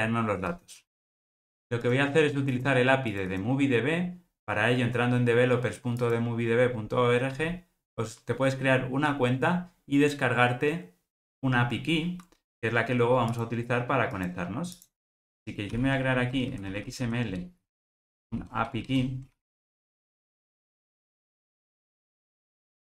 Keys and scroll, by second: 15.7 super+n.